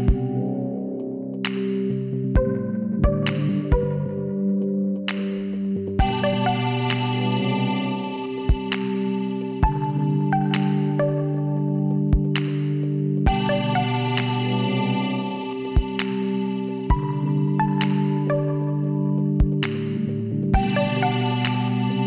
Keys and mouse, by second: 0.3-5.2 middle drag, 0.5 z, 6.3 KP_1, 6.9 middle click, 7.8 middle click, 9.1 shift+d, 10.7 z, 12.3-13.9 drag, 13.1 s, 17.4 e, 18.9-20.7 drag, 20.3 z, 21.2 middle click.